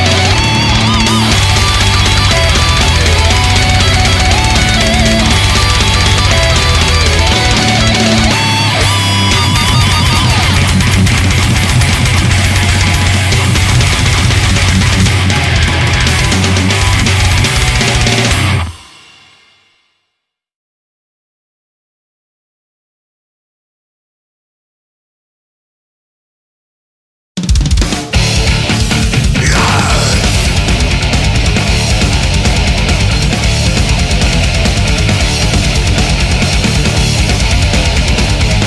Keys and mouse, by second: 7.0 right click, 9.7 right click, 11.6 right click, 12.6 right click, 12.9 right click, 16.9 right click, 18.4 right click, 18.6 right click, 20.6 right click, 22.3 right click, 23.6 right click, 24.6 right click, 26.0 right click, 26.4 right click, 26.8 right click, 27.2 right click, 32.2 right click, 32.6 right click, 33.0 right click, 34.2 right click, 34.8 right click, 35.6 right click, 36.8 right click, 37.2 right click, 37.5 right click, 38.1 right click.